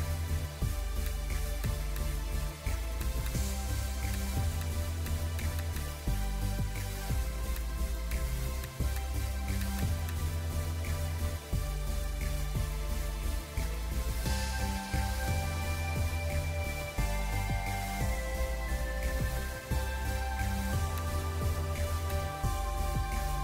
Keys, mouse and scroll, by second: 5.5 double click, 7.0 ], 7.1 ], 9.7 double click, 10.9 scroll down 1, 20.0 scroll up 1, 20.4 scroll down 1, 22.6 scroll down 1.